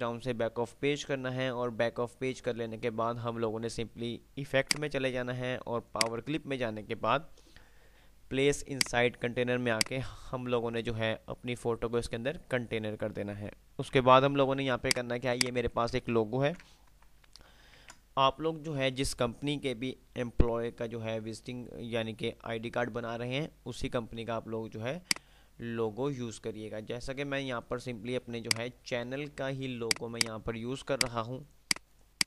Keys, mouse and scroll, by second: 4.8 click, 8.3 click, 14.2 F3, 14.8 click, 16.7 ctrl+g, 16.7 Delete, 17.8 z, 25.3-28.2 drag, 28.5 F2, 28.8 click, 29.2 F2, 30.0 click, 31.2 ctrl+click.